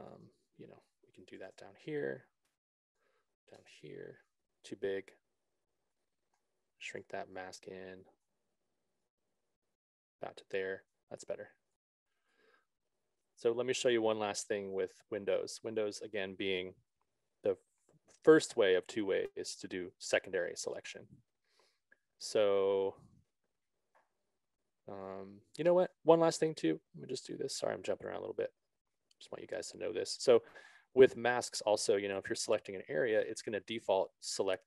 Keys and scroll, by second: 1.7 0, 2.1 Return, 3.9 3, 4.1 Return.